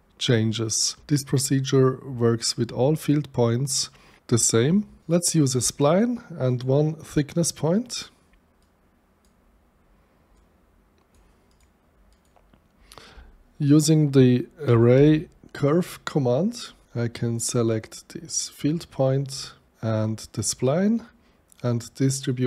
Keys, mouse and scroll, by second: 5.0 click, 6.4 click, 7.1 click, 8.4 ctrl+z, 8.6 click, 10.3 click, 11.5 click, 12.1 click, 14.7 a, 14.9 r, 15.8 r, 16.8 Return, 17.5 click, 20.2 click.